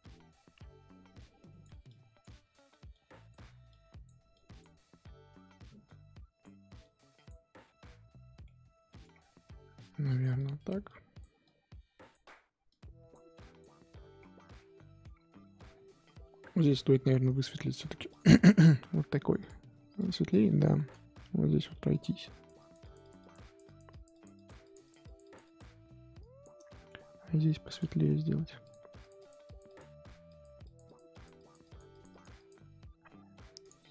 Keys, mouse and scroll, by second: 0.4-1.1 scroll up 1, 1.1-7.6 drag, 7.6-8.4 scroll down 3, 8.4 scroll down 1, 8.5 middle click, 9.0 scroll down 1, 9.1-9.8 scroll up 5, 9.8-14.0 drag, 14.0-14.5 scroll down 6, 14.5 middle click, 15.1-16.7 scroll up 7, 16.7-17.6 scroll up 3, 17.6-19.4 drag, 19.9 click, 20.6 ctrl+z, 21.5 f, 22.3-26.6 drag, 26.6-27.7 shift+middle drag, 27.7 click, 28.2 f, 29.0-33.9 drag.